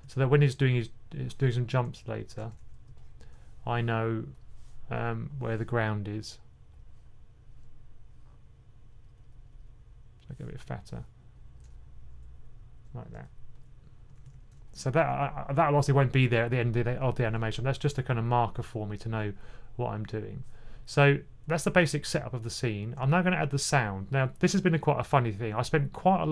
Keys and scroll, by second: 2.3 2, 14.1 1, 14.3 1.